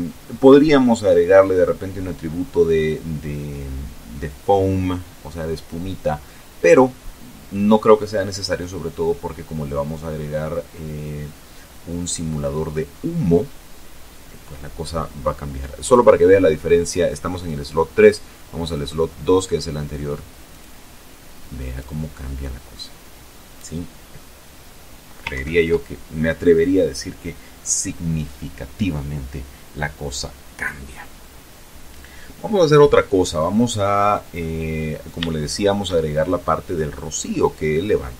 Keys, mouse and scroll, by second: 14.8 click, 17.7 click, 19.5 click, 20.7 click, 24.2 ctrl+Right, 32.3-33.5 drag, 34.8-35.5 shift+scroll up 3.